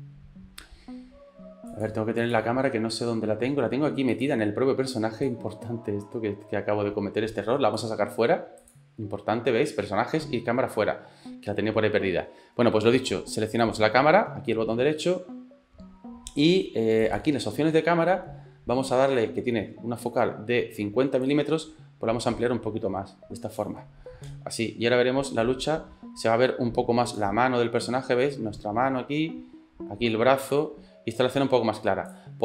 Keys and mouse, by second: 1.7 click, 4.2 click, 5.3-7.9 drag, 13.6-17.0 right drag, 17.0 click, 21.3-23.7 drag, 24.3 space, 26.0 space, 27.2-28.5 drag.